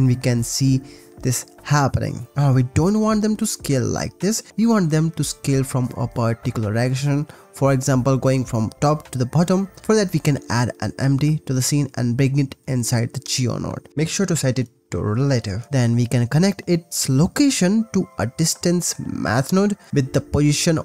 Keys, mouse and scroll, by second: 0.8 shift+middle click, 2.0 scroll up 1, 2.3 middle click, 3.8 shift+middle click, 7.0 click, 7.7-9.5 drag, 9.8 shift+a, 11.0 g, 11.1 z, 12.1 click, 12.2 Delete, 12.4 click, 13.4 click, 14.6 click, 15.6 click, 17.2 click, 17.5 click, 18.2 drag.